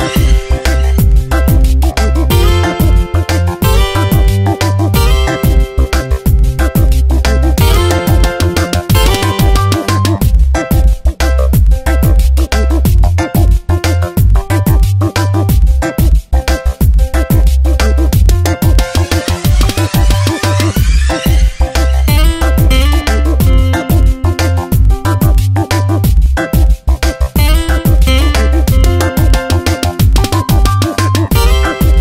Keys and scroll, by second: 0.3 space, 1.8 ctrl+z, 3.0 ctrl+z, 5.3 ctrl+z, 10.5 ctrl+shift+], 15.1 ctrl+t, 15.8 Tab, 22.5 Return, 23.1 shift+Down, 23.3 shift+Left, 24.6 shift+Down, 24.9 shift+Left, 30.2 Tab.